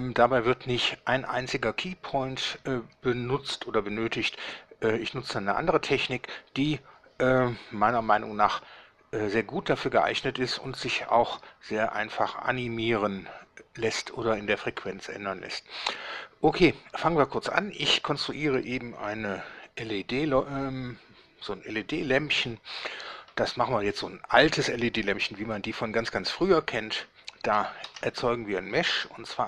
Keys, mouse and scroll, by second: 27.9 shift+a.